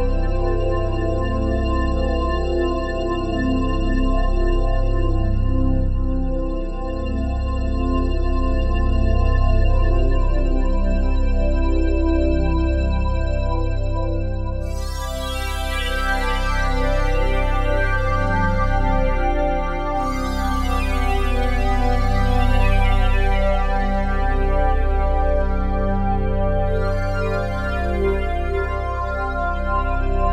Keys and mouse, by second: 2.2 ctrl+s, 3.1-4.6 alt+drag, 5.0-6.4 drag, 6.4 1, 8.5 g, 12.1 shift+click, 12.9 ctrl+alt+click, 14.2-15.6 shift+drag, 14.2 typing, 17.5 typing, 18.5-20.3 drag, 20.3-20.7 typing, 23.4-25.4 drag, 26.0 3, 27.1 click, 27.8 alt+click, 28.4 ctrl+alt+click, 29.3 typing.